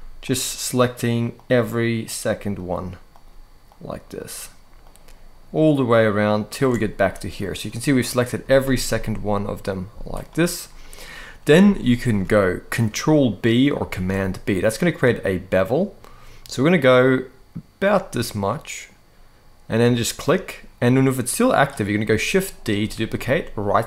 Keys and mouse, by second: 0.0 alt+shift+click, 1.1 alt+shift+click, 1.8 alt+shift+click, 2.4 alt+shift+click, 2.9 alt+shift+click, 3.5 alt+shift+click, 4.0 alt+shift+click, 4.6 alt+shift+click, 6.1 alt+shift+click, 7.4 middle click, 8.2 z, 8.7 middle click, 9.6 z, 10.4 middle click, 11.4 shift+middle click, 13.6 ctrl+b, 22.6 shift+d.